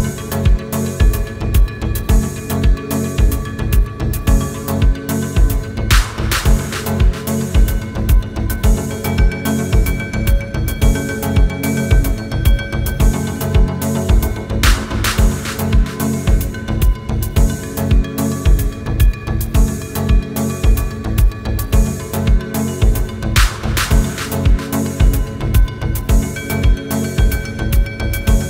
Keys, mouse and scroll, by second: 2.9-3.9 typing, 5.1-7.4 drag, 9.7 space, 9.9-10.5 click, 10.0 space, 11.2-15.2 drag, 15.6 typing, 16.2 shift+click, 18.1 click, 20.5 Left, 23.0 click, 23.0 typing, 24.4 shift+Down, 26.2 ctrl+space, 26.6-27.1 ctrl+click, 26.8-27.6 ctrl+space, 27.5 space.